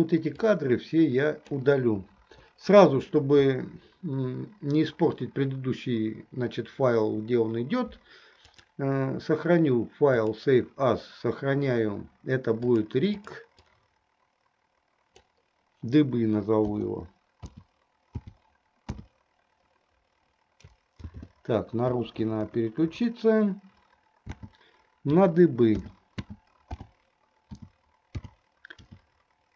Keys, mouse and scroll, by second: 0.7-1.6 drag, 2.4 Delete, 8.5-10.8 drag.